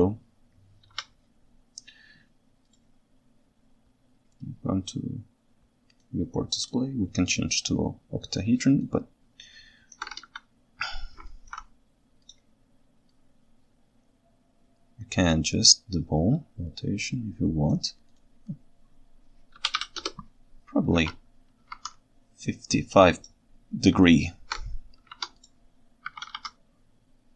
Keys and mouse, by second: 1.0 KP_1, 8.8-10.0 ctrl+shift+right drag, 10.3 KP_3, 11.3 ctrl+alt+right click, 13.4-20.9 drag, 21.1 alt+a, 21.7 ctrl+Tab, 24.1-24.6 ctrl+shift+right drag, 26.2 r, 26.3 y.